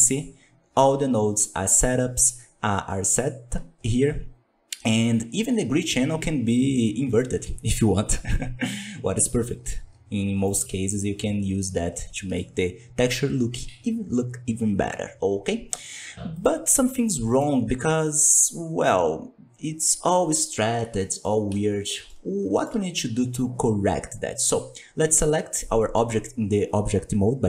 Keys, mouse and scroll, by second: 10.9-11.9 scroll up 4, 11.9-12.4 shift+middle drag, 12.4-16.3 scroll up 2, 16.3 click, 16.7-17.0 scroll down 1, 17.0-17.4 middle drag, 17.4 scroll up 1, 17.7 Tab, 18.0 middle click, 18.9-19.6 scroll up 1, 19.6 scroll up 3, 20.1-20.5 scroll down 3, 20.9 middle click, 21.4 a, 21.7 scroll down 3, 22.0-25.5 shift+middle drag, 25.5 Tab, 25.9 Tab.